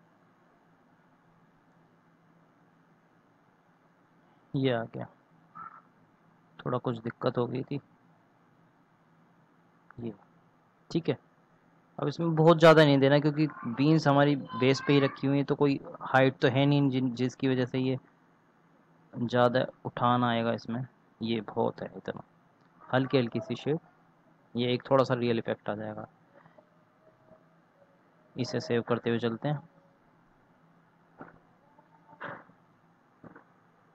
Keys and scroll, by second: 17.0 ctrl+z, 28.3 ctrl+s.